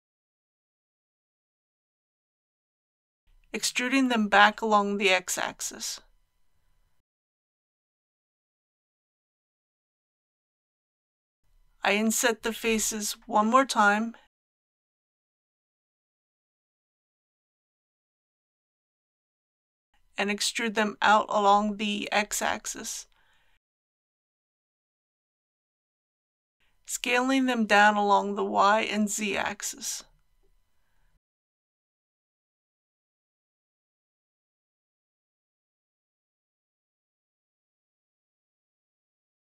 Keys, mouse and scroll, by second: 2.5-4.9 middle drag, 5.0-5.3 typing, 9.9 click, 10.8 KP_3, 17.8 click, 18.6-19.9 middle drag, 20.2-20.5 typing, 23.2 click, 24.3-26.9 middle drag, 27.4 s, 28.5 shift+x, 33.8 click, 34.7 alt+a, 35.7-36.2 scroll down 1, 36.6-39.4 middle drag.